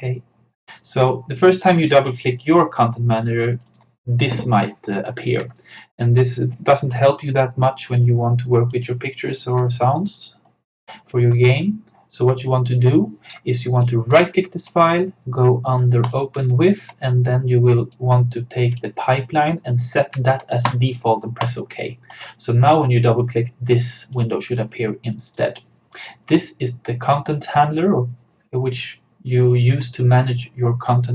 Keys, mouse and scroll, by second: 8.0-11.3 drag, 11.1 typing, 12.7 click, 12.8 typing, 14.2 right click, 17.0-29.6 drag.